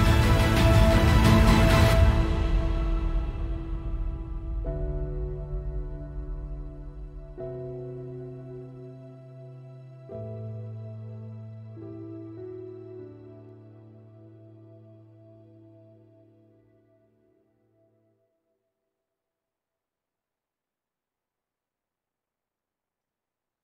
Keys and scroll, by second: 18.6 Delete, 21.3 f, 23.1 Return, 23.2 Return.